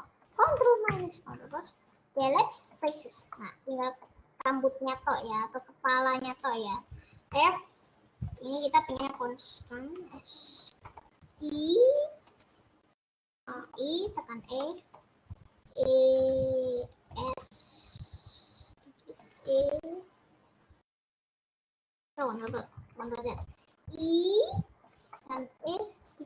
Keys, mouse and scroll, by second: 0.5 click, 0.8 KP_Add, 3.0 Delete, 3.5-5.3 middle drag, 5.3-6.4 drag, 7.2 f, 8.5 click, 9.3 middle click, 10.1 s, 10.9 middle click, 11.2 e, 13.7-16.3 middle drag, 16.3 e, 17.3 s, 19.6 e, 22.6 ctrl+z, 23.4 middle click, 25.1 middle click, 25.7 e.